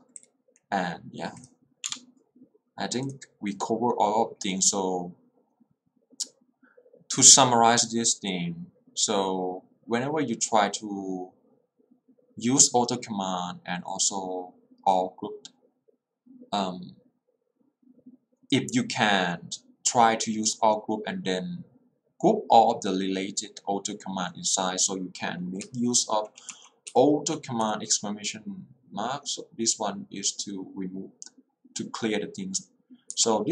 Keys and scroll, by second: 1.9 Return, 25.7 k, 27.0 h, 27.7 l, 33.2 k.